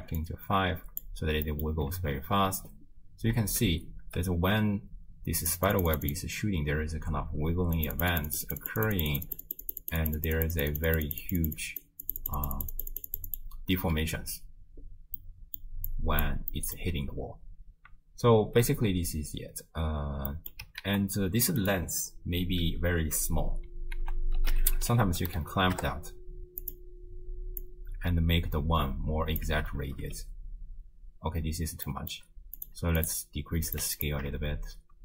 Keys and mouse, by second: 0.2-1.1 drag, 1.5 middle click, 2.0 shift+space, 3.5 shift+space, 4.1 space, 5.5 click, 5.8 click, 7.8 click, 8.0 click, 8.5 click, 9.2 click, 10.1 click, 11.0 click, 11.5 click, 12.1 click, 12.5 click, 12.8 click, 13.4 click, 15.2 middle click, 15.9 click, 16.6 middle click, 18.4 shift+space, 20.3 middle click, 20.3 space, 20.9 ctrl+a, 24.0 ctrl+a, 25.5 Down, 27.6-29.4 drag, 29.8 shift+space, 31.9 click, 31.9 space, 32.6 click, 33.7 click, 34.5 shift+space.